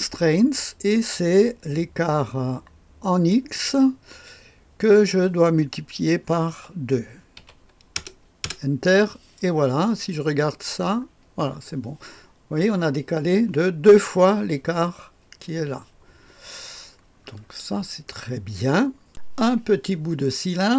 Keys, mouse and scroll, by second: 3.2 click, 6.5 *, 7.3 KP_2, 7.9 Return, 8.4 Return, 9.8-10.3 scroll up 1, 10.3-13.4 scroll up 1, 16.8-19.0 scroll down 1, 19.0 click.